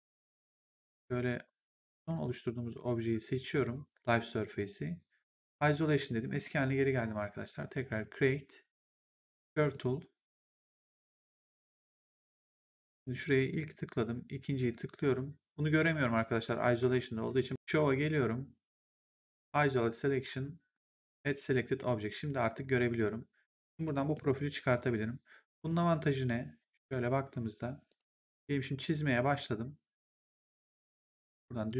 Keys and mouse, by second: 2.0 click, 5.5 click, 7.8 click, 9.5 click, 13.5 click, 17.2 click, 21.3 click, 23.8 middle click, 25.6 click, 27.8 click, 30.9 click.